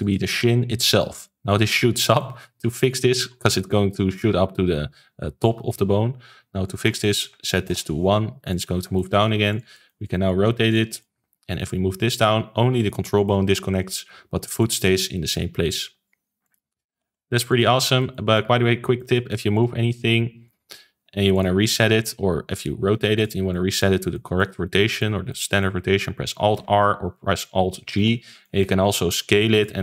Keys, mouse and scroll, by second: 0.8-6.4 shift+middle drag, 6.6-8.5 drag, 8.7 ctrl+s, 8.9 middle click, 9.4 click, 9.7 middle click, 10.0 r, 10.8-11.6 middle drag, 11.6 click, 15.3 r, 16.8 alt+g, 17.0 alt+r, 17.4 click, 17.7 ctrl+s, 17.9-19.5 shift+middle drag, 19.5 click, 19.9 g, 21.0 g, 22.4 r, 23.4-26.5 middle drag, 26.5 alt+r, 27.9 alt+g, 28.4-29.0 shift+middle drag, 29.0 s.